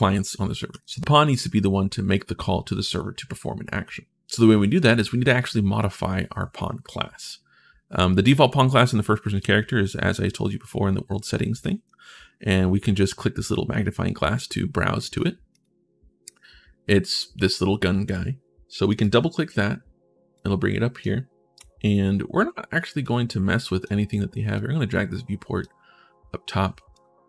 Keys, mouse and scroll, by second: 0.5 w, 0.9 right click, 11.4 click, 15.3 click, 18.7 click, 20.1 click, 22.8 click, 24.3-25.4 drag, 26.7-27.2 drag.